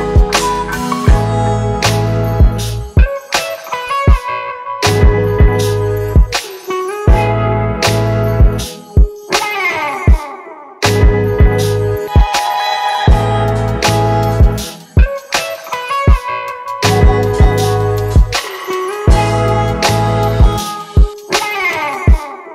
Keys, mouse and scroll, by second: 19.4 right click.